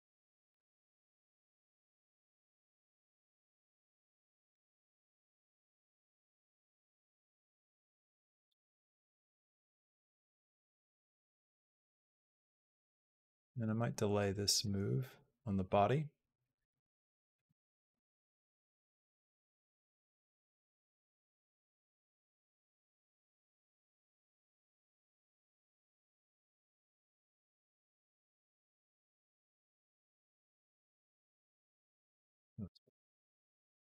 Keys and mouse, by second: 1.0 click, 1.2 b, 2.4 b, 3.0 g, 4.3-12.5 drag, 13.4 click, 14.4-15.5 drag, 16.2 click, 17.1 click, 17.5 shift+click, 17.7 g, 18.6-19.9 drag, 20.1 g, 21.1-30.5 drag, 30.4 space, 32.0 space, 32.5 click, 32.7 space.